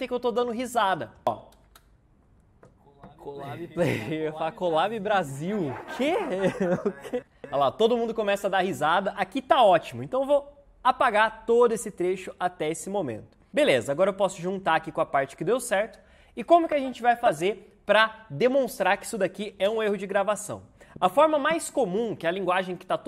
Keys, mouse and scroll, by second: 7.1 space, 13.9-16.9 drag.